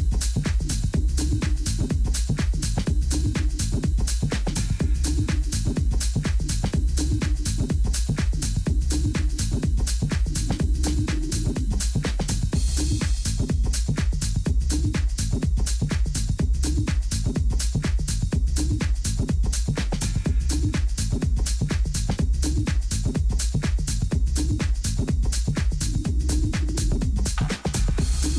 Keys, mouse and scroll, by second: 1.5-2.7 middle drag, 3.5-7.0 right drag, 6.0 click, 6.9-10.0 middle drag, 10.3-12.2 drag, 12.0 right click, 14.5 Tab, 15.1 a, 15.6 Tab, 16.2 middle click, 18.7 a, 19.0 a, 19.4 a, 20.6-22.3 right drag, 21.5 a, 22.6-26.1 middle drag.